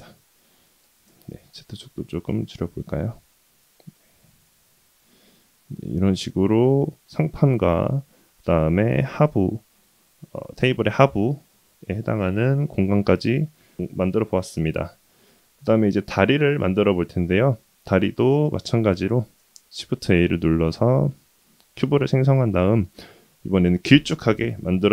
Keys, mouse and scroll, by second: 0.8 s, 3.6 g, 4.9-7.5 middle drag, 7.8 scroll up 2, 7.9 middle click, 8.1-8.8 scroll down 2, 8.3-8.8 middle drag, 9.2-9.6 middle drag, 9.8-10.6 middle drag, 11.2-11.6 middle drag, 13.0-13.5 middle drag, 13.8-14.2 scroll up 2, 14.2 scroll down 2, 14.4-15.6 middle drag, 16.5 click, 17.0-17.3 middle drag, 19.2 shift+a, 21.8-23.3 middle drag.